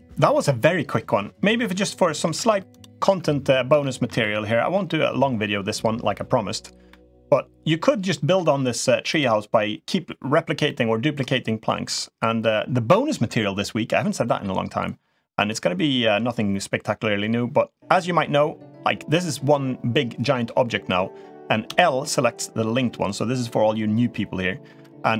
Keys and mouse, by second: 1.4-1.8 middle drag, 2.0 Tab, 2.8 Tab, 3.6 middle drag, 4.0 middle click, 7.4 middle click, 8.9 click, 10.4-11.7 middle drag, 15.2 click, 21.4 l, 24.9 middle click.